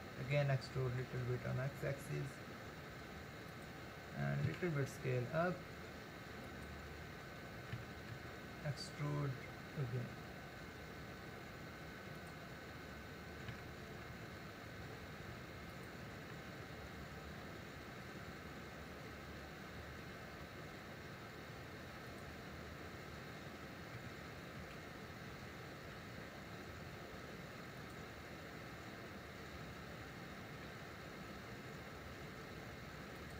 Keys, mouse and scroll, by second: 0.3 e, 4.5 s, 7.8 e, 13.5 e, 24.0 e, 30.7 e.